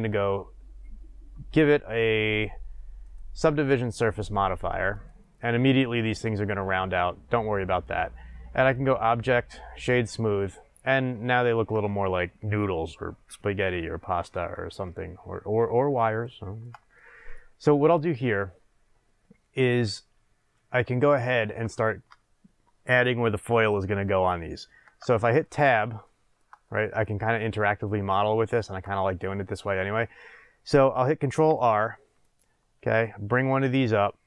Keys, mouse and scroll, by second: 3.0-14.3 drag, 14.3-17.1 middle drag, 18.5 scroll up 1, 20.8 shift+middle click, 24.8 Tab, 25.0-27.7 middle drag, 26.6-27.7 scroll up 2, 31.5 ctrl+r.